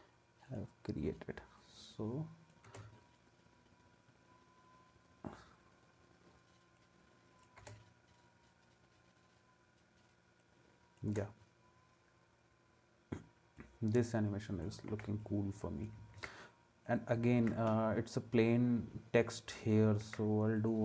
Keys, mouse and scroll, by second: 2.6 space, 7.6 space, 11.1 space, 14.9 ctrl+s, 16.2 ctrl+s, 17.4 ctrl+s, 20.0 ctrl+s.